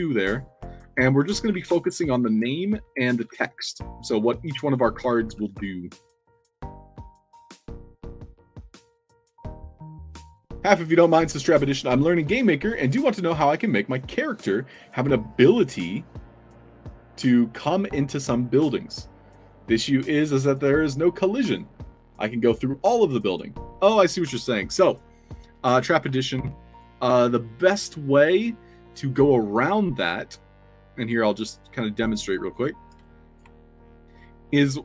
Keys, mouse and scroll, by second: 0.3-5.6 typing, 26.6 click, 28.1 click, 29.1 click, 31.0 click, 31.5 click, 31.9 click, 32.2 click, 32.5 click, 33.0-33.3 alt+drag, 33.9 Tab.